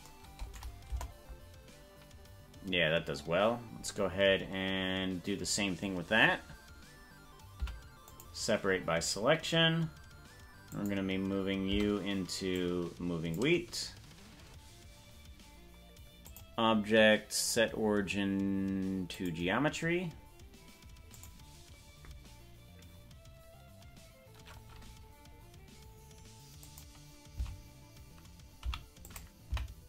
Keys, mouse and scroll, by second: 0.9 KP_0, 7.7 p, 10.7 click, 11.9 Tab, 12.5-13.9 drag, 16.2-19.3 drag, 21.1 click, 26.7 click, 27.5 Left, 28.7 i.